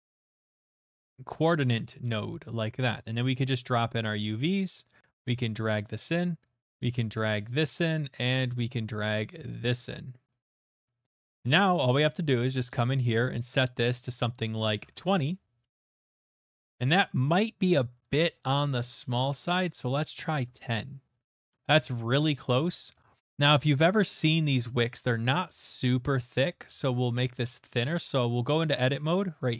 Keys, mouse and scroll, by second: 0.0-0.7 typing, 1.6 Return, 2.3 click, 4.4 click, 5.6 click, 7.4 click, 7.5 click, 10.3 click, 11.5 click, 12.2 click, 13.5 click, 14.7 typing, 14.9 Return, 16.2 middle click, 16.3 middle click, 16.4 middle click, 16.6 middle click, 16.8 middle click, 16.8 middle click, 17.2 shift+middle click, 17.3 shift+middle click, 19.5 click, 20.1 typing, 20.4 Return, 21.7 middle click, 21.9 shift+middle click, 22.5 middle click, 22.9 shift+middle click, 25.2 middle click, 25.3 Tab, 26.0 click, 26.8 ctrl+click, 27.6 typing, 28.4 right click, 29.4 click.